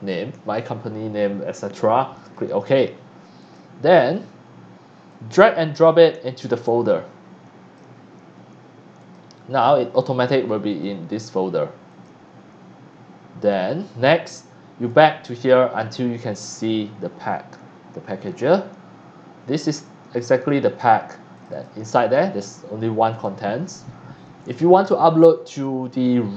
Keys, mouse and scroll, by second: 2.2 click, 3.4 click, 4.0 click, 5.1-7.7 drag, 8.9 click, 9.6 click, 10.7 click, 11.1 click, 11.9 click, 13.5 click, 14.8 click, 21.3 click, 21.5 click, 23.1 click, 26.3 click.